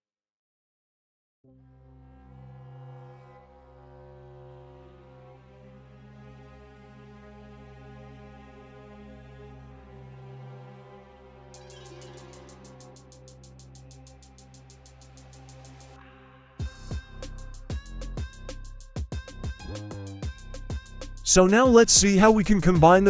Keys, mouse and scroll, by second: 0.3-1.0 scroll down 1, 1.0-2.0 scroll down 5, 2.0 middle click, 2.8-11.5 drag, 12.1 click, 12.6 click, 13.3-14.4 scroll up 4, 14.4 scroll down 1, 15.5 click, 16.0-16.4 shift+middle drag, 18.5 click, 19.2 shift+middle click, 20.9 click.